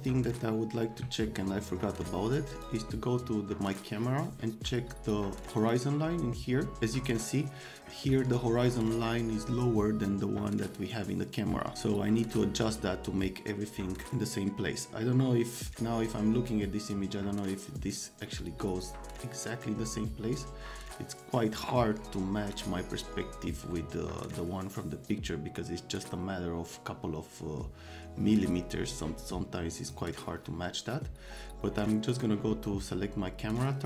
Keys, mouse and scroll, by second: 0.0 click, 2.5 click, 3.7 click, 5.6 click, 29.8 click, 32.1 click, 33.6 click.